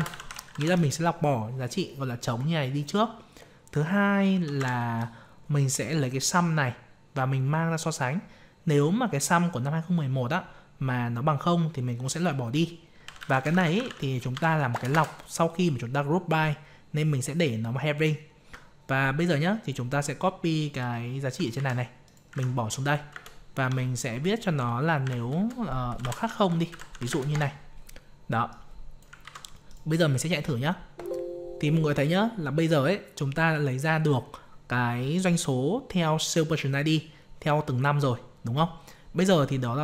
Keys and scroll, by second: 21.5 ctrl+c, 22.9 ctrl+v, 29.2 ctrl+c.